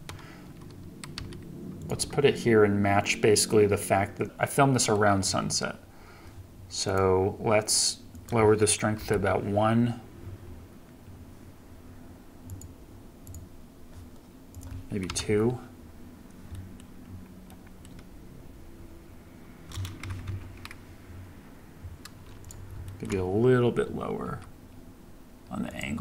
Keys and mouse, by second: 1.3 g, 2.1 r, 5.2 KP_0, 12.5 click, 14.5 click, 16.5-16.8 middle drag, 17.6 middle click, 20.1 KP_2, 20.2 KP_3, 22.9 shift+drag, 24.3 r.